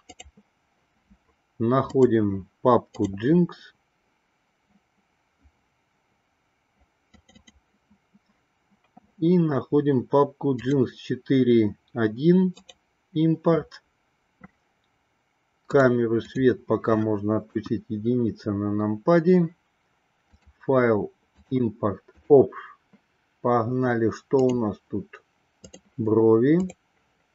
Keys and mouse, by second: 15.9 click, 16.4 click, 17.5 KP_1, 20.4-22.5 drag.